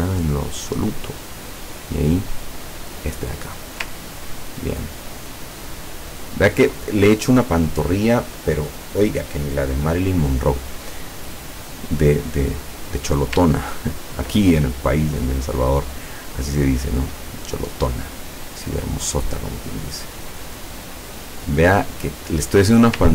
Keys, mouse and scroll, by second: 0.3-3.3 drag, 4.1-5.0 ctrl+scroll down 4, 5.5 ctrl+scroll up 2, 6.1-6.6 ctrl+scroll down 4, 12.1 click, 13.6-14.1 ctrl+scroll up 2, 16.9-23.0 drag.